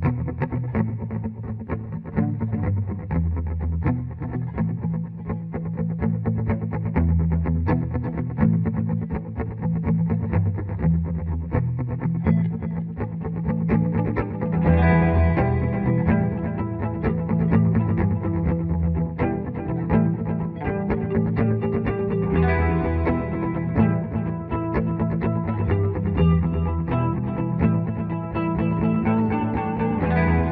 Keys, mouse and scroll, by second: 0.6 ctrl+z, 1.3-2.6 alt+drag, 2.6 Page_Up, 3.6-5.4 drag, 5.4 Escape, 5.7 F4, 5.9-7.6 drag, 7.7 Escape, 8.1 F3, 8.4 F4, 10.1-12.1 drag, 12.1 Escape, 12.6 click, 14.6-19.4 drag, 19.4 space, 20.7 shift+click, 20.9 shift+c, 21.2 shift+click, 22.0 F3, 22.1 ctrl+r, 22.4 shift+click, 25.3-27.1 shift+drag, 27.1 ctrl+r, 27.8 F2, 28.2-30.5 drag.